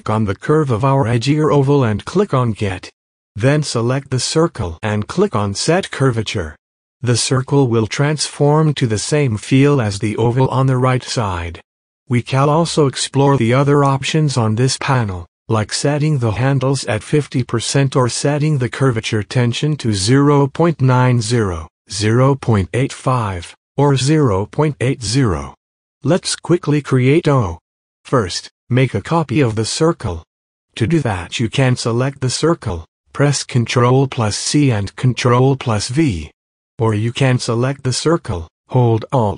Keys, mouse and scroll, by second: 1.9-3.6 drag, 6.5 click, 8.5 space, 8.7 click, 8.9 space, 10.0 click, 26.1 click, 27.6 space, 27.6 click, 35.3 ctrl+t, 38.1-39.3 drag.